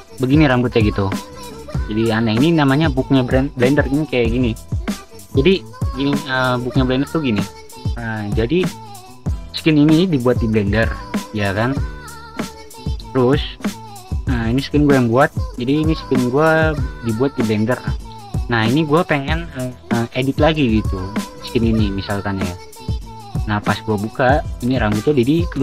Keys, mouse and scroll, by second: 10.8 v, 22.6 v, 23.0 v.